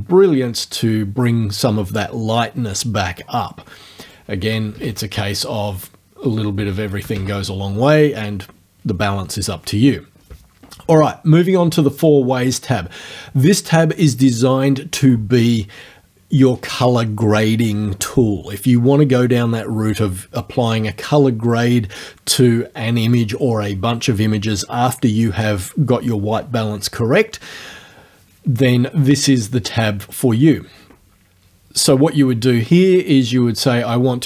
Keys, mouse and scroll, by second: 4.0 right click, 4.7 KP_0, 4.8 KP_Enter, 6.2 right click, 7.0 KP_0, 7.2 KP_Enter, 12.0 click, 12.4 click, 33.2-34.2 drag.